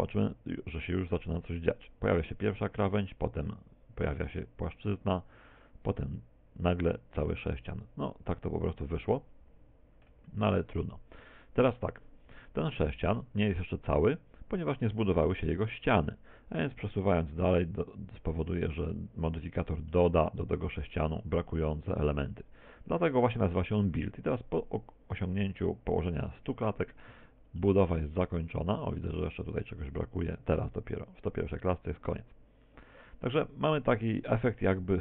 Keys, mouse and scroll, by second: 13.3 z, 13.9 middle click, 15.3 middle click, 16.1 middle click, 17.9 click, 20.9 middle click, 22.6 click.